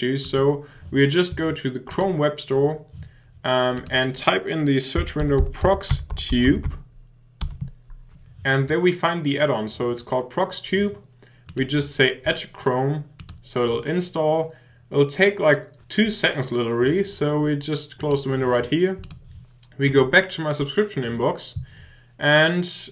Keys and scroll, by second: 7.4 Return.